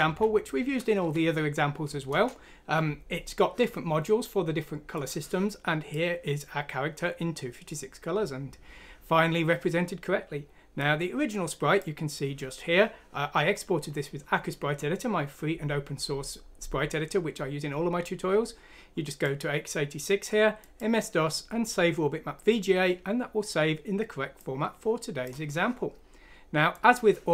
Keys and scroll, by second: 0.0 F6, 1.0 Down, 2.1 Return.